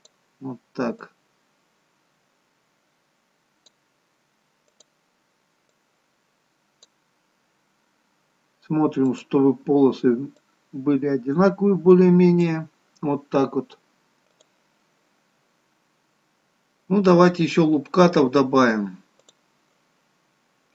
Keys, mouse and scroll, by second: 1.0 click, 4.7 click, 5.6 click, 9.0 click, 10.7 click, 19.2 click.